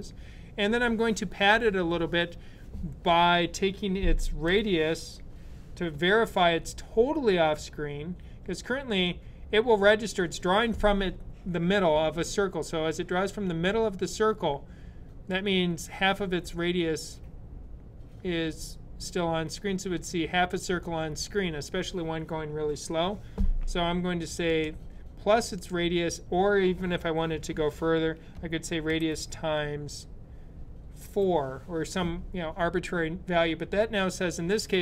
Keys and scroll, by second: 4.3 r, 28.7 shift+8, 33.0 4.